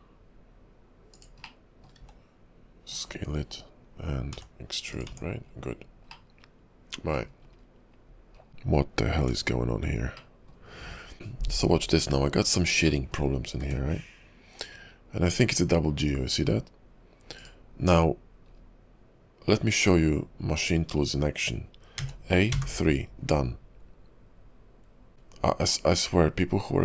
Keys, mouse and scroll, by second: 1.6 middle click, 2.0 s, 4.4 e, 5.1 Tab, 5.6-6.3 scroll down 4, 6.3 middle click, 7.4-8.1 scroll down 4, 8.5 shift+middle click, 8.5-9.1 scroll up 4, 9.1 Tab, 10.3 middle click, 10.8-11.1 scroll down 3, 11.1-11.7 scroll up 1, 11.7-12.4 scroll up 3, 12.4 click, 13.0 shift+middle click, 13.6 g, 18.6-19.3 scroll down 3, 22.0 a, 22.6 3, 25.1 scroll down 5.